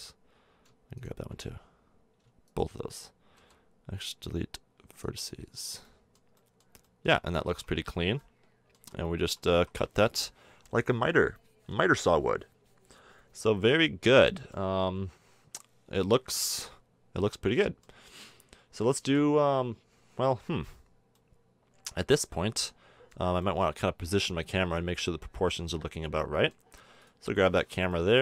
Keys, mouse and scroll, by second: 3.3 x, 5.5 middle click, 6.5 middle click, 6.8-7.9 middle drag, 7.3 a, 7.5 Tab, 8.8 z, 9.2 z, 9.6 a, 12.1-13.2 middle drag, 14.0 middle click, 14.9 KP_1, 18.9-20.9 middle drag, 21.1-23.0 middle drag, 23.4-28.2 middle drag.